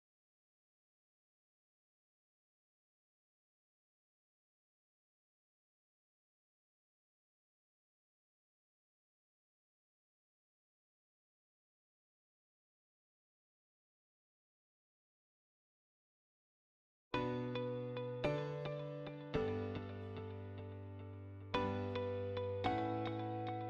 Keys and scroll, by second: 21.4 m, 21.5 space.